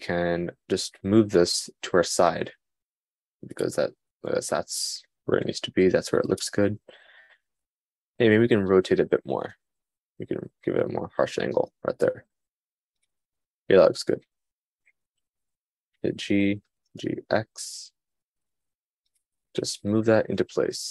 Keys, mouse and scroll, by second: 1.1 g, 5.4 g, 8.6 r, 16.6 g, 20.7 g.